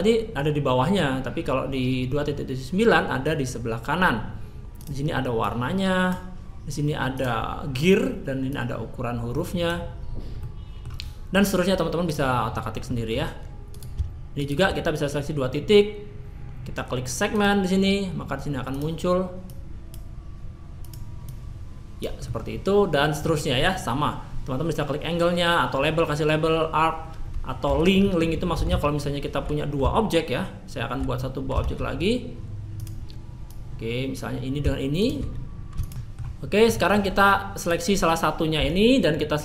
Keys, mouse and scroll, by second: 27.7 Tab, 33.4-38.5 drag, 38.5 Tab, 38.7-39.4 right drag.